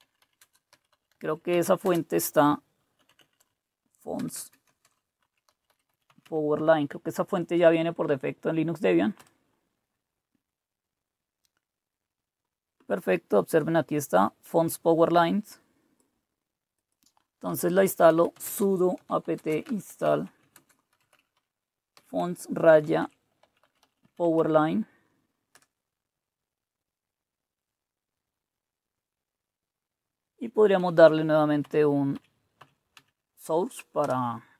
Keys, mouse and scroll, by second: 0.0-7.1 typing, 9.4 Return, 14.5-17.3 drag, 17.7-25.5 typing, 30.8 Up, 31.0 Up, 31.6 Up, 32.1 Up, 32.6 Up, 32.9 Down, 34.0 Return.